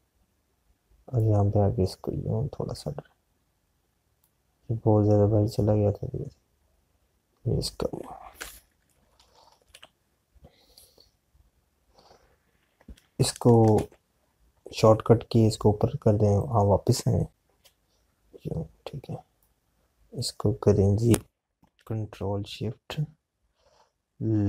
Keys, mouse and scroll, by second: 6.3 click, 17.7 click, 18.0 Right.